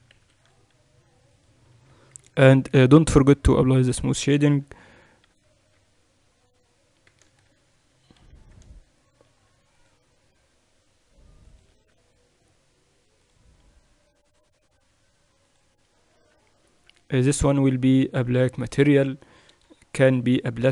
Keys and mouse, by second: 0.9 ctrl+r, 2.5 Tab, 5.3-6.3 drag, 5.3 t, 6.3 Tab, 6.9-8.3 middle drag, 8.3 ctrl+f, 10.0 ctrl+r, 12.4 Tab, 13.9-20.7 drag, 16.7 Tab, 17.3 Tab.